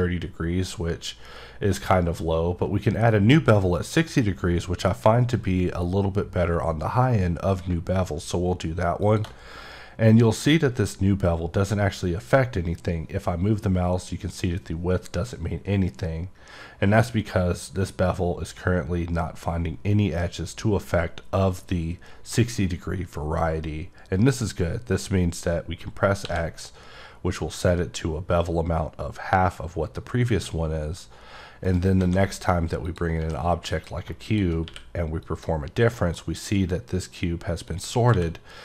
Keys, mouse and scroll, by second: 9.0 click, 9.1 click, 31.7 right click, 32.8 click, 33.7 click, 34.3 click, 35.2 click, 35.9 middle click, 36.2-37.6 scroll up 2, 37.7 click.